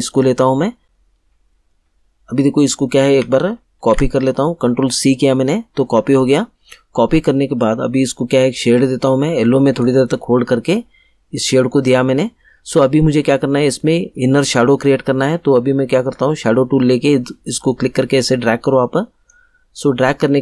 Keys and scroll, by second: 3.7 ctrl+c.